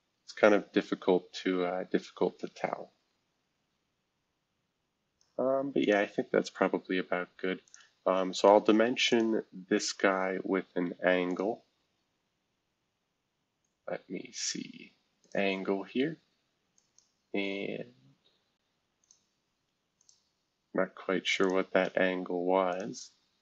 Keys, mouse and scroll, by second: 5.8 click, 6.8 scroll up 1, 7.7 click, 9.1 click, 11.3 click, 15.2 click, 16.7 click, 19.0 click, 20.0 click, 21.4 shift+click, 22.7 click.